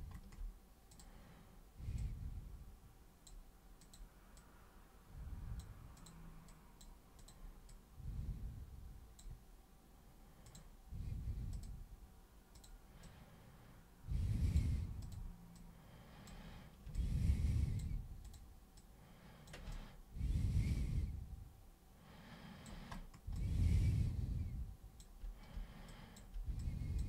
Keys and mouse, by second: 0.9 click, 2.0 click, 3.8 click, 4.4 click, 6.0 super+click, 6.5 super+click, 7.2 super+click, 7.7 super+click, 10.5 super+click, 11.5 super+click, 12.6 super+click, 13.0 super+click, 15.0 super+click, 15.6 super+click, 17.0-17.8 alt+super+drag, 18.3 super+click, 18.8 super+click, 19.7-22.7 alt+super+drag, 23.4-25.0 alt+super+drag, 25.9 alt+super+click, 26.6 alt+super+click.